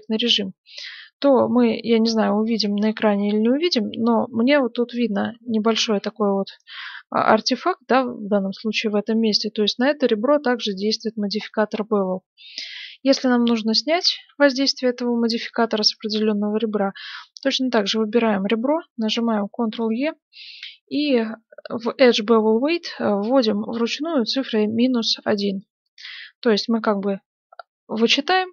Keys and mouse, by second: 2.4-8.0 middle drag, 11.9-13.4 middle drag, 13.3 Tab, 15.8-17.4 right drag, 17.4-19.0 drag, 19.0 ctrl+e.